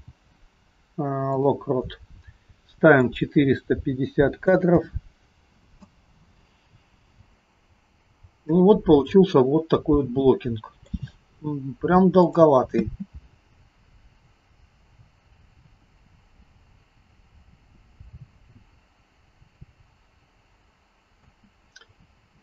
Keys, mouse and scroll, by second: 3.1 click, 6.7-7.3 scroll down 2, 7.3-8.5 scroll down 10, 9.0 middle click, 9.0-9.8 scroll down 5, 12.3 click, 12.8 space, 13.8-14.7 scroll down 4, 21.2 space.